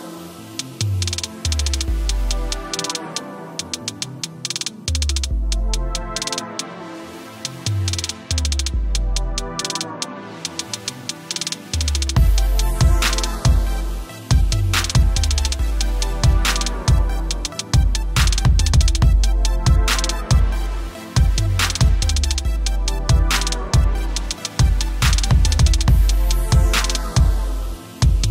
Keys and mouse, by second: 0.7 Down, 1.8 alt+click, 5.8 click, 6.4 b, 12.6 click, 15.3-16.3 typing, 17.4 click, 19.0 Up, 19.7 click, 20.1 t, 20.4 t, 20.7 click, 22.4 click, 22.6-24.0 typing, 23.1 click, 24.4 click, 25.6 click.